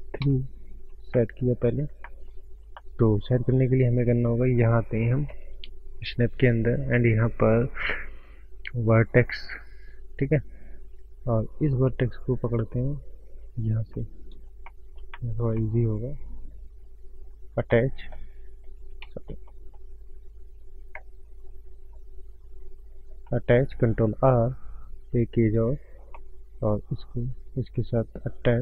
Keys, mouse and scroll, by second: 0.4 KP_3, 1.2 shift+middle click, 1.7-2.7 scroll up 5, 2.1 shift+middle click, 2.7 shift+middle click, 3.9 click, 6.1 click, 7.2 click, 8.5 click, 11.1 click, 11.6 click, 12.8 click, 13.7 scroll up 2, 14.0 middle click, 14.8 scroll up 1, 15.0 middle click, 15.2 shift+middle click, 15.6 shift+middle click, 16.7 click, 17.8 middle click, 19.1 ctrl+z, 19.3 scroll up 1, 19.5 middle click, 19.9 scroll down 2, 20.1 scroll up 1, 20.2 middle click, 21.5 click, 23.4 middle click, 24.9 middle click, 26.2 middle click, 27.1 click, 27.8 click.